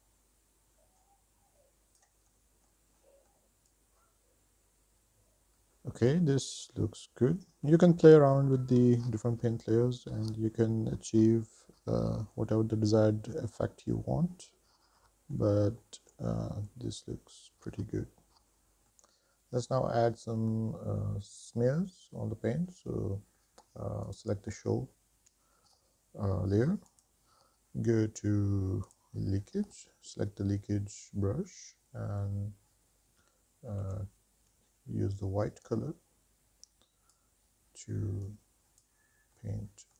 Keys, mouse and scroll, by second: 0.0 middle click, 0.0 shift+middle click, 0.2 shift+middle click, 0.2 shift+scroll down 1, 0.3 middle click, 0.6 f, 0.9 click, 1.2 click, 1.7 click, 2.1 middle click, 2.4 shift+middle click, 2.7 scroll up 3, 3.0 click, 3.7 middle click, 3.8 scroll down 2, 4.0 shift+middle click, 4.5 scroll up 2, 4.7 shift+middle click, 4.9 middle click, 5.5 middle click, 10.7-15.7 middle drag, 16.2 shift+middle click, 16.6-18.9 middle drag, 20.3 middle click, 24.3 click, 27.1-29.2 drag, 34.0 x, 35.9-37.5 drag, 38.5 click, 39.7 middle click.